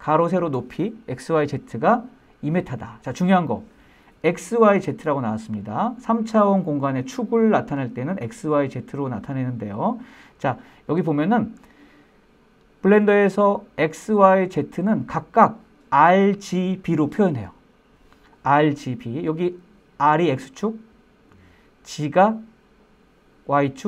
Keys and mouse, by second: 12.7-13.2 middle drag.